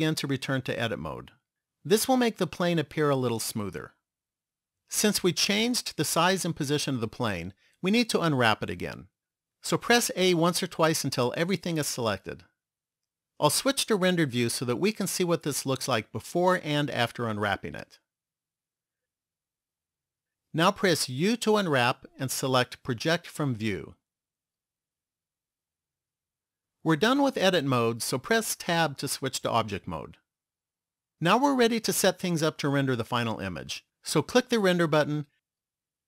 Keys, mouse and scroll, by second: 0.3 Tab, 10.5 a, 11.3 a, 14.8 click, 21.5 u, 28.9 Tab, 34.8 click.